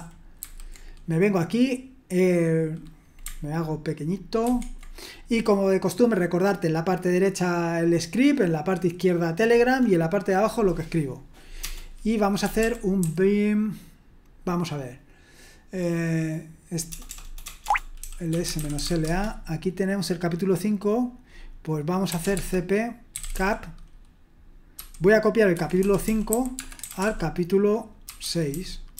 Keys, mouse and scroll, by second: 0.4 super+h, 4.4 ctrl+1, 11.6-13.5 typing, 16.9-19.5 typing, 21.9-28.9 typing.